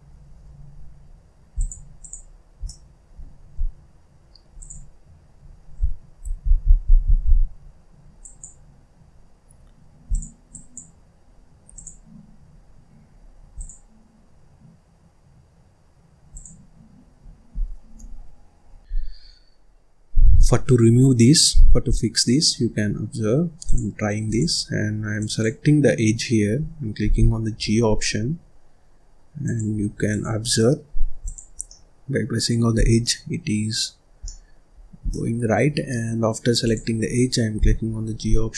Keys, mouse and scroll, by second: 1.9 click, 2.2-2.6 scroll down 1, 2.6 middle click, 3.5 z, 6.1 ctrl+z, 6.8 ctrl+z, 7.5-8.1 scroll up 1, 8.1 click, 9.0-9.5 scroll up 2, 9.5-10.0 scroll down 1, 10.0 click, 10.4 click, 11.2-11.6 scroll up 2, 11.6 click, 12.0-12.4 scroll down 1, 12.4-13.4 scroll up 2, 13.4 click, 16.2 click, 19.2-19.5 scroll down 1, 19.5 scroll up 1, 20.0-20.5 scroll up 4, 20.5-20.8 scroll down 4, 20.8-21.2 scroll up 1, 21.2 scroll down 1, 21.3 middle click, 21.8 scroll down 1, 22.1 middle click, 22.5-23.6 scroll up 1, 23.6-24.7 drag, 24.7-25.2 scroll up 2, 25.2 click, 27.0 g, 30.1 click, 30.6 middle click, 31.2 click, 31.5 scroll down 1, 31.6-32.7 middle drag, 32.7 scroll down 1, 33.0-34.7 middle drag, 34.7-35.1 scroll up 3, 35.1 middle click, 36.6 click, 37.5 g.